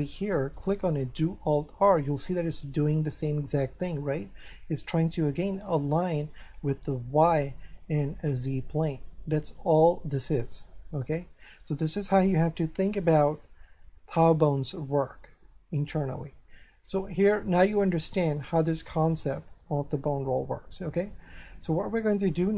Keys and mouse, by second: 0.5 right click, 1.6 alt+r, 2.1 middle click, 3.8 middle click, 10.9 middle click, 12.5 shift+middle click, 21.8 shift+middle click.